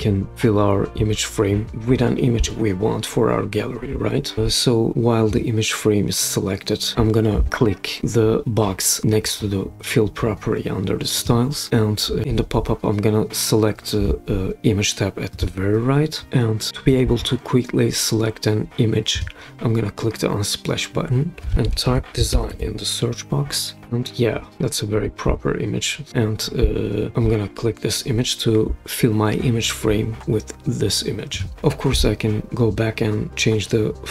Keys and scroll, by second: 21.4-22.9 typing.